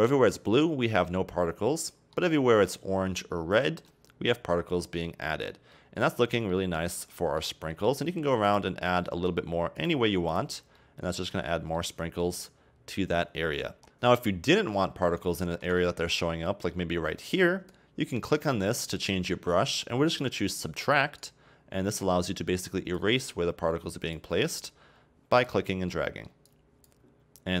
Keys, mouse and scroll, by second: 0.9 scroll down 1, 1.1-3.5 middle drag, 3.5-3.9 scroll down 2, 3.9-5.6 middle drag, 5.6 scroll down 2, 5.8-6.1 middle drag, 6.1-6.5 scroll up 3, 6.5-8.5 middle drag, 8.5-9.1 drag, 9.1-9.9 middle drag, 9.9-10.5 drag, 10.8-12.8 middle drag, 12.8-13.8 scroll up 1, 13.8 scroll up 1, 15.4-17.7 shift+middle drag, 17.7-20.7 drag, 21.3-25.9 drag, 25.9-26.5 middle drag, 26.5-27.6 drag.